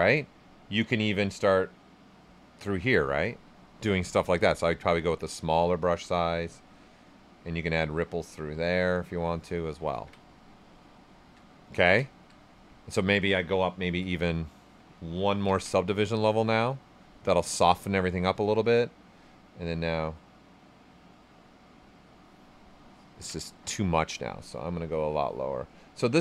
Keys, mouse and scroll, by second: 1.1-11.1 drag, 11.1 alt+right click, 17.1 alt+right click, 19.1 ctrl+right click, 21.1-23.1 drag, 23.1 ctrl+z, 25.1-26.2 drag.